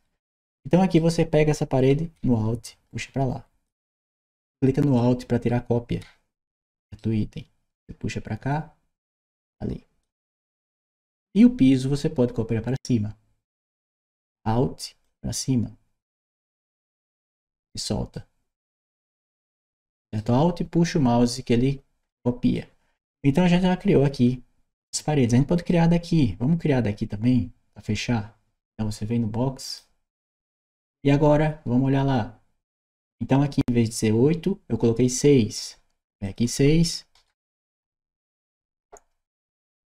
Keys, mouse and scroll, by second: 0.2 right click, 2.0 alt+a, 2.5-3.5 alt+drag, 4.8-6.8 alt+right drag, 7.6-9.9 drag, 11.1 click, 14.9-17.2 alt+drag, 18.0-20.0 alt+right drag, 22.4-25.5 right drag, 23.2 d, 29.5 click, 36.1 click.